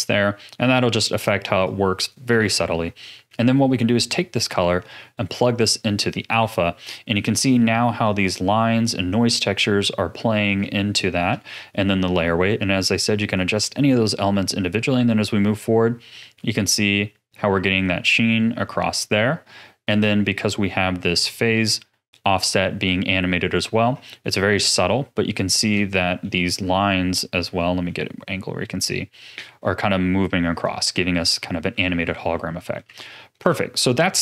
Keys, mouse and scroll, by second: 1.6 click, 2.4 ctrl+s, 2.8-3.1 scroll up 3, 3.1-4.1 middle drag, 4.1 click, 6.4 a, 6.8-8.0 middle drag, 8.0-8.6 scroll up 5, 9.3-9.8 scroll down 3, 9.8-13.3 middle drag, 13.3-16.3 drag, 20.2 middle click, 20.6-21.1 scroll down 4, 21.1-23.5 middle drag, 23.5-23.8 scroll down 1, 23.8-24.2 scroll up 4, 24.2-24.9 middle drag, 24.9-25.9 scroll down 4, 25.9-26.4 shift+middle drag, 26.4-27.3 scroll up 3, 27.3-28.8 middle drag, 28.8-30.9 drag, 30.9-31.9 scroll down 10, 31.9 ctrl+s, 32.3-34.2 middle drag.